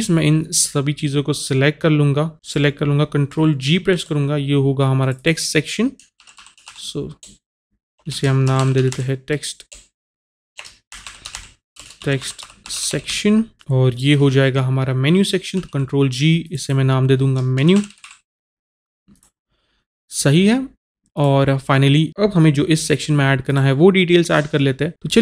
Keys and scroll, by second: 3.9 ctrl+g, 6.2 shift+t, 6.4 e, 6.6 x, 7.2 BackSpace, 8.1 Caps_Lock, 8.5-9.7 typing, 10.9-13.1 typing, 15.6 ctrl+g, 17.6-18.0 typing.